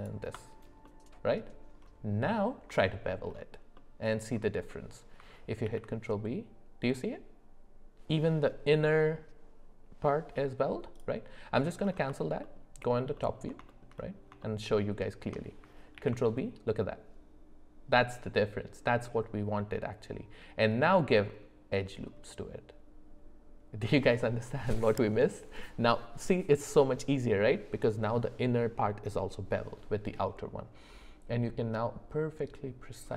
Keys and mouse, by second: 0.0 alt+shift+click, 0.8 middle click, 2.3 middle click, 2.8 shift+middle click, 3.7 middle click, 4.7 middle click, 5.6 ctrl+b, 12.4 alt+middle click, 13.1 alt+middle click, 13.7 shift+middle click, 14.4 shift+middle click, 16.0 ctrl+b.